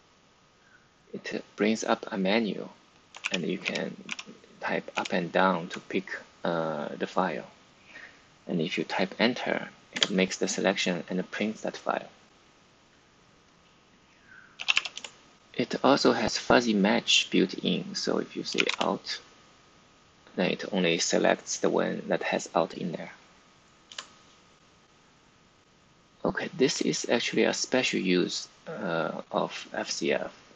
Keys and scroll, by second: 3.1 Page_Down, 3.5 Page_Up, 4.0 Page_Down, 4.9 Page_Up, 9.9 Return, 14.2-15.1 typing, 18.2-19.1 typing, 23.8 Return.